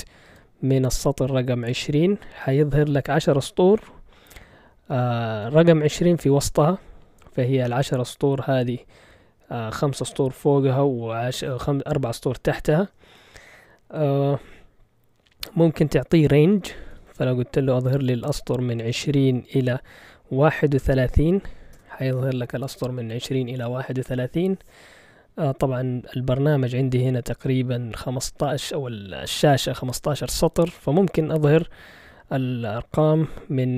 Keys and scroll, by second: 0.0-0.2 typing, 1.4-2.2 typing, 5.9 Return, 16.4 ctrl+l, 16.9 typing, 18.6-22.2 typing.